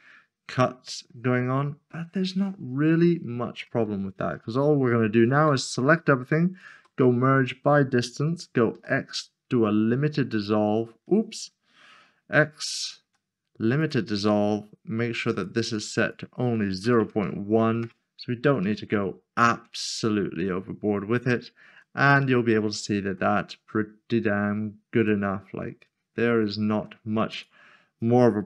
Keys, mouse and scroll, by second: 0.1-0.9 scroll down 1, 1.9 middle click, 3.1 scroll down 1, 3.8 middle click, 4.4-5.4 scroll down 1, 5.4 typing, 6.7 typing, 7.2 click, 8.7 typing, 10.3 click, 12.2-13.0 typing, 13.8 click, 16.9 typing, 17.8 Return, 19.2 shift+middle click, 19.9 middle click, 21.4 scroll up 1, 21.8 shift+middle click, 23.6 middle click, 25.9 middle click, 26.1 scroll up 1, 26.4 shift+middle click, 27.3 click.